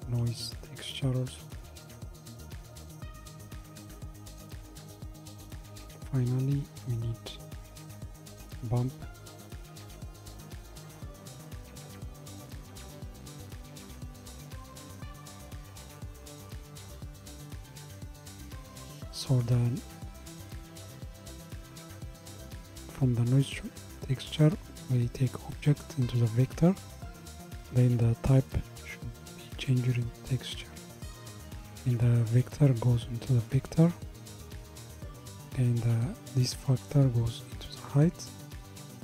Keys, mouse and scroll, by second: 5.1 click, 5.6 shift+a, 17.9-19.2 scroll up 1, 24.9-30.6 drag, 32.7 click, 36.7 click.